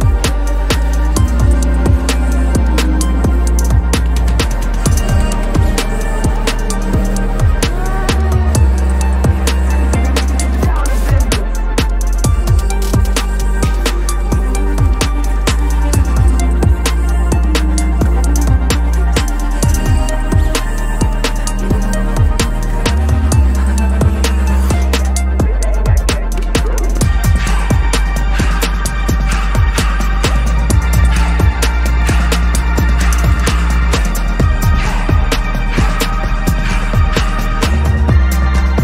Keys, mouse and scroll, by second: 0.5 ctrl+=, 0.6 space, 2.1 alt+click, 2.3 ctrl+-, 2.4 space, 2.6 double click, 3.1 ctrl+z, 3.2 double click, 3.2 space, 3.7 space, 4.3 alt+click, 4.5 ctrl+-, 5.1 double click, 5.4 right click, 6.5 Return, 9.9 alt+click, 11.9 typing, 15.6 ctrl+-, 15.7 ctrl+-, 16.1 ctrl+=, 16.3 ctrl+=, 16.5 ctrl+=, 16.7 ctrl+=, 17.1 space, 18.2 ctrl+=, 18.4 ctrl+=, 18.8 space, 19.5 ctrl+=, 19.7 ctrl+space, 20.8 p, 23.4 alt+click, 23.6 space, 23.7 double click, 23.7 space, 27.9 space, 28.4 space, 28.5 double click, 28.5 space, 28.9 double click, 29.8 right click, 31.6 ctrl+-, 31.8 ctrl+-, 31.9 ctrl+-, 32.1 ctrl+-, 36.1 double click.